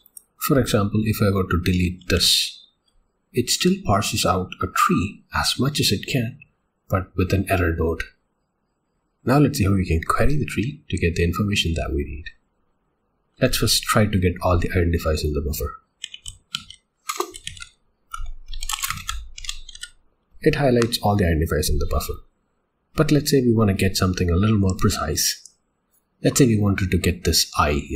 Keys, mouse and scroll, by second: 2.2 d.